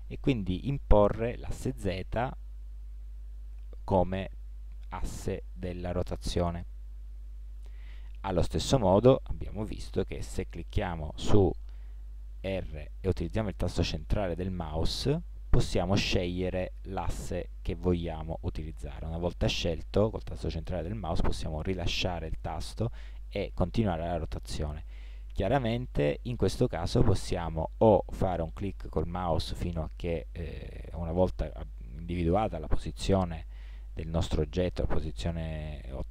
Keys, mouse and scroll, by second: 12.4 r.